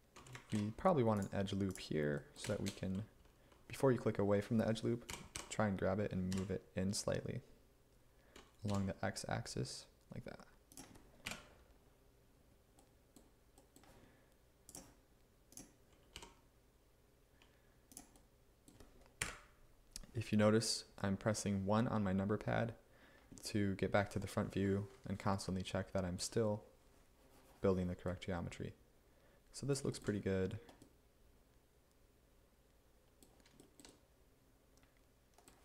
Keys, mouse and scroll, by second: 0.6 ctrl+r, 5.2 g, 5.4 y, 6.4 z, 8.7 x, 11.3 1, 16.2 g, 19.3 Up.